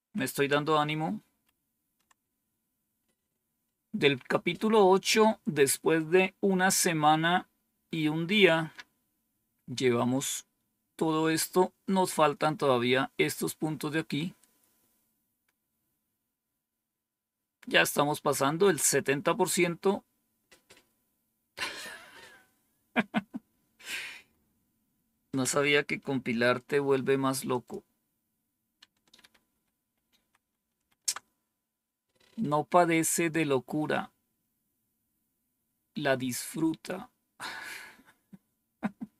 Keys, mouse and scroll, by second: 27.4 click, 29.1 ctrl++, 29.4 ctrl++, 29.7 ctrl++, 29.9 ctrl++, 32.3-32.9 scroll down 1, 33.3-34.6 scroll down 1, 34.6 scroll down 1.